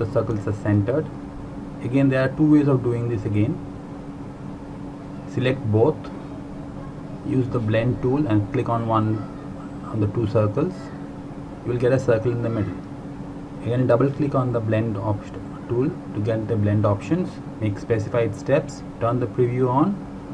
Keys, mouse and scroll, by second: 13.5 click, 18.2 click.